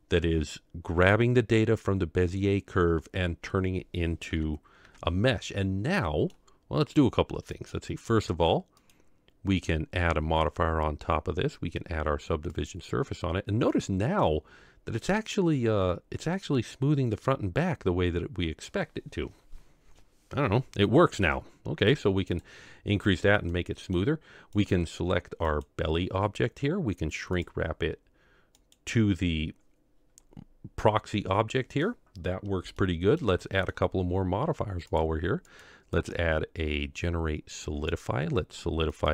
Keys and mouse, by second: 4.2 KP_Divide, 4.9 KP_Divide, 6.0-6.4 middle drag, 8.8-12.7 drag, 13.7-14.4 middle drag, 17.1-18.8 middle drag, 22.4 click, 23.6-24.0 middle drag, 24.6 click, 25.6 click, 27.4 click, 31.0-32.0 middle drag, 32.8-33.2 shift+middle drag, 33.4 middle click, 35.0 drag, 36.0-38.0 drag, 39.0-39.1 drag.